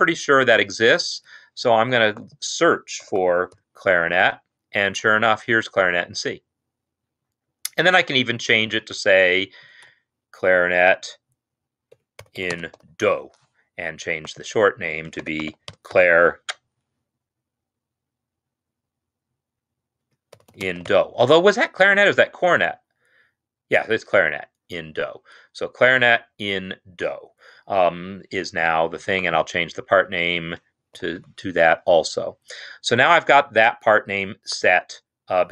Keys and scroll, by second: 3.1-3.7 typing, 8.7 Home, 9.3 shift+Right, 9.5 shift+Right, 9.9 BackSpace, 10.5 End, 11.9 Return, 12.1-13.1 typing, 14.7 ctrl+a, 15.2-16.0 typing, 20.1 Return, 20.3-20.7 typing, 22.6 typing, 29.9 shift+Left, 30.1 shift+Left, 31.0 shift+d, 31.2 o.